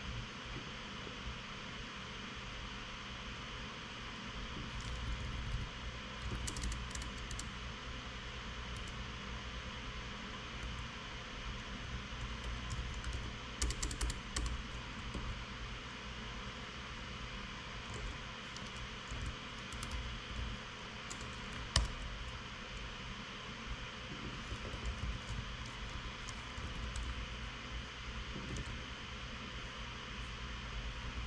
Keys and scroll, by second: 5.9 alt+shift+Right, 6.0 alt+shift+Right, 6.9 super+f, 7.1 Return, 7.3 Return, 7.6 Return, 7.9 Return, 9.4-10.0 Return.